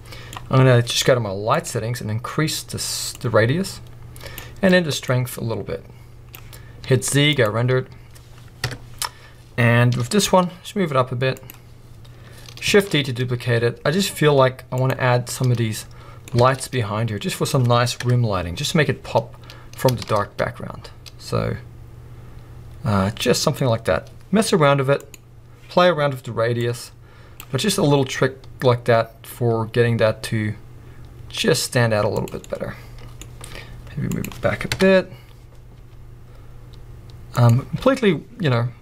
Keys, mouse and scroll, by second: 3.3-11.6 drag, 7.6 z, 8.6 KP_0, 9.9 g, 12.8 shift+d, 14.9 click, 15.2 scroll down 1, 15.3-17.5 middle drag, 16.4 shift+d, 17.5 click, 18.0 KP_0, 20.1 shift+d, 23.6 click, 24.5 g, 25.2 click, 26.7-32.3 drag, 27.7 g, 32.4-34.3 middle drag, 33.5 g, 34.3 click, 34.7 KP_0, 35.8 g, 37.5 click.